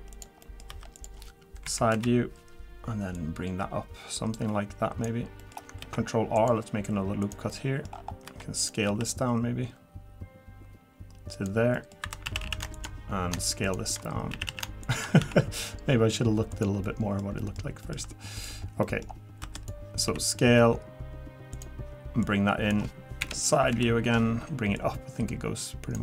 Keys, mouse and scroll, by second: 0.4 middle click, 0.7 3, 0.9 click, 1.6 KP_1, 1.9 KP_3, 3.1 click, 5.4 middle click, 5.8 ctrl+r, 7.5 middle click, 7.9 scroll down 3, 8.1 scroll up 1, 8.2 3, 8.6 click, 8.9 s, 11.7 middle click, 12.0 2, 12.3 a, 12.4 a, 12.7 alt+shift+click, 14.3 a, 14.5 a, 14.8 alt+shift+click, 15.2 s, 16.8 middle click, 17.4 middle click, 17.8 middle click, 18.4 click, 18.8 middle click, 19.4 3, 19.5 click, 20.0 s, 22.2 click, 23.2 KP_1, 23.7 KP_3, 24.7 click.